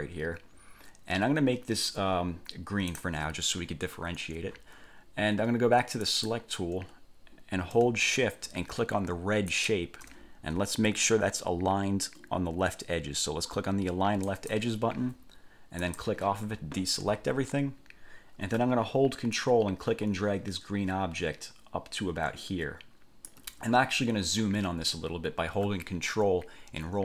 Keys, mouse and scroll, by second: 3.1 click, 6.2 click, 9.7 shift+click, 14.4 click, 16.0 click, 19.5-23.6 ctrl+drag.